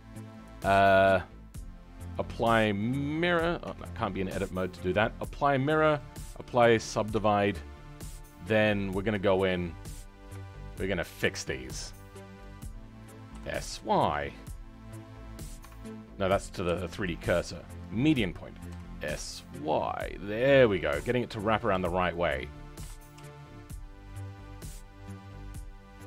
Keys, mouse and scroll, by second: 6.4 click, 7.1 Tab.